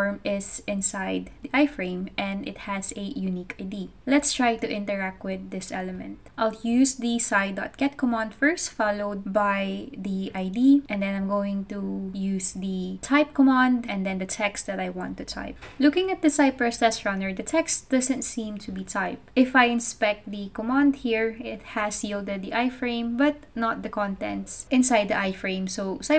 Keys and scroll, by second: 2.7 super+c, 5.1-7.0 typing, 8.2 super+3, 8.9 alt+3, 9.4 super+v, 10.1 Right, 10.2 Right, 14.0-15.4 typing.